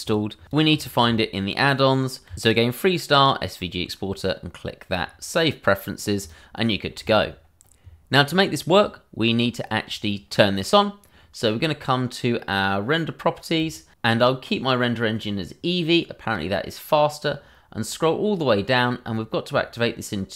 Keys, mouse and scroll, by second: 2.9 r, 3.1 e, 6.2 click, 8.3-8.7 scroll down 1, 8.8 middle click, 9.5-10.4 scroll up 1, 13.5 click, 17.4-17.8 scroll.